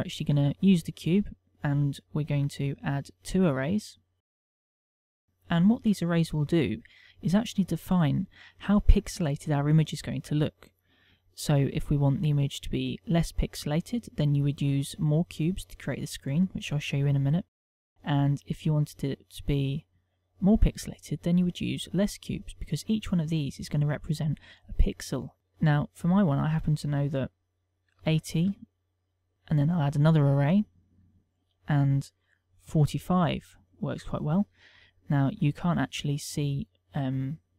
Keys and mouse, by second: 0.1 shift+middle click, 0.8 middle click, 1.8 KP_1, 3.0 click, 4.1 click, 26.4 ctrl+click, 29.2 click, 29.8 click, 31.7 ctrl+click.